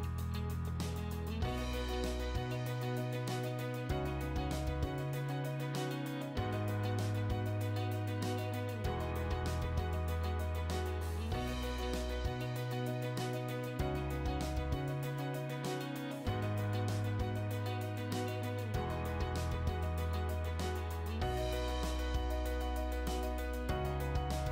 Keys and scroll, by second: 1.5 Escape, 2.8 p, 3.2 space, 5.0 space, 7.4 space, 11.9 b, 12.4 space, 14.9 space, 19.1 v, 21.9 i, 22.1 space.